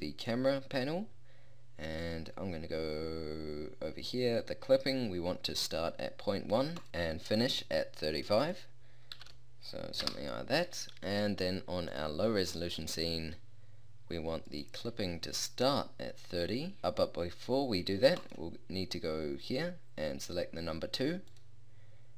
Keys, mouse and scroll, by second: 6.9 0, 10.1 click, 12.3-13.9 drag, 14.5-22.1 drag.